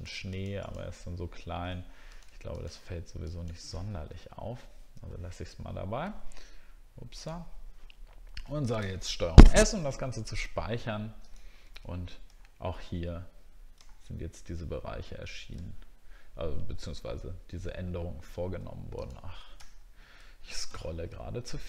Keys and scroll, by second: 3.9-4.4 alt+scroll down 2, 5.0-5.4 alt+scroll down 1, 5.6 alt+scroll up 1, 12.3 alt+scroll up 1, 13.8 alt+scroll up 1, 15.6 alt+scroll down 1, 17.3 alt+scroll down 1, 17.9 alt+scroll down 1, 19.7 alt+scroll down 1, 20.8 alt+scroll down 1.